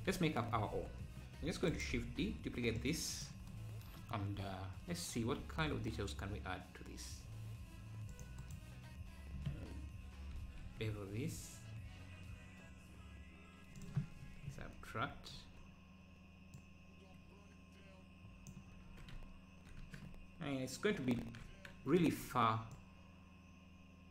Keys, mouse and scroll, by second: 1.4 shift+d, 2.8 click, 4.5-4.9 scroll down 1, 5.4 ctrl+r, 10.3 ctrl+b, 14.5 KP_Subtract, 16.6 click, 18.9 Tab, 19.8 Tab, 21.2 ctrl+l, 22.8 click.